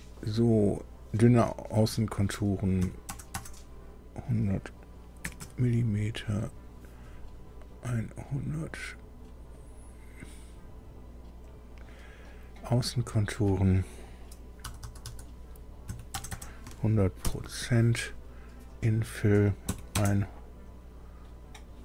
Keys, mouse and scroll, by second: 2.8 KP_1, 3.3 KP_0, 5.2 m, 5.9 Up, 5.9 m, 7.9 click, 9.5 click, 11.4 click, 14.6-17.2 typing, 18.8 click, 19.6 KP_1, 19.9 KP_0.